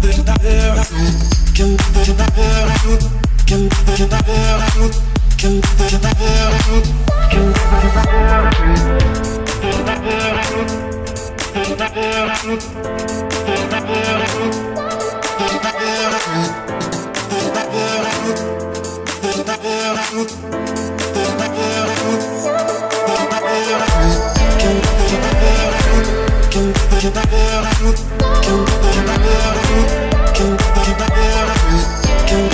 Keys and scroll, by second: 0.0 Escape, 1.1 Escape, 14.2 Escape, 17.3 Escape.